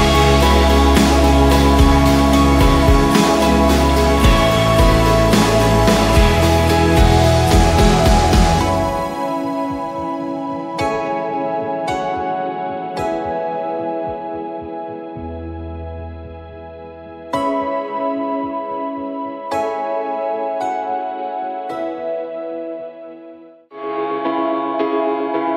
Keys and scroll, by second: 0.1 Left, 1.2 Left, 1.3 Left, 1.4 Left, 1.6 Left, 1.8 Left, 7.5-8.9 typing, 11.1 v, 11.8 ctrl+d, 12.3 shift+Left, 12.4 shift+Left, 13.8 shift+Left, 18.9 typing, 19.4 Return, 22.4-23.3 typing, 23.4 Return, 23.9 ctrl+t, 25.4 Return.